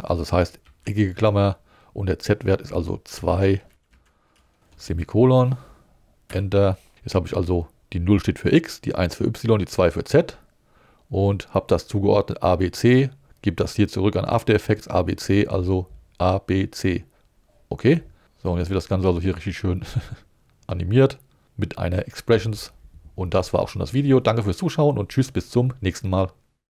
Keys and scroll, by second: 0.8 alt+5, 3.1 2, 3.9 Right, 4.7 shift+Right, 4.8 shift+,, 6.3 Up, 18.2 space.